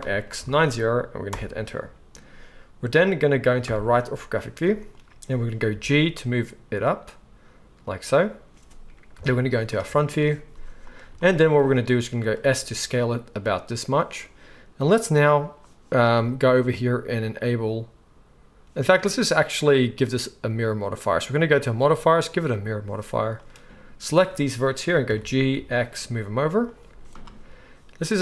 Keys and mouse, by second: 3.6 KP_3, 5.7 g, 7.9-20.0 middle drag, 9.1 KP_1, 10.5 z, 12.1 s, 20.0 click, 20.1-21.4 middle drag, 21.4 click, 25.0 g, 26.8-28.2 middle drag, 26.9 z.